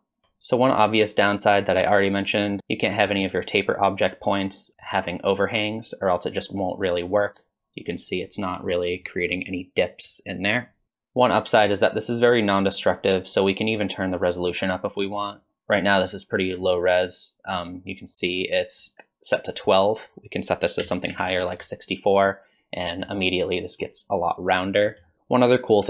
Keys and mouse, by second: 0.2 Tab, 4.9-9.0 drag, 10.8 ctrl+z, 10.8 Tab, 11.5 click, 20.0-22.1 drag, 25.1 shift+middle drag.